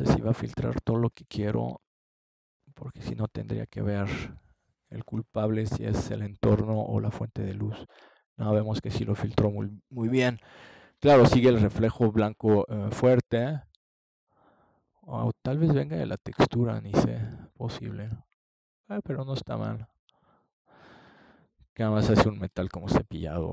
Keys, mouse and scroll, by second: 6.0-7.9 drag, 9.5-11.7 drag, 15.8-17.0 drag, 21.4 KP_0.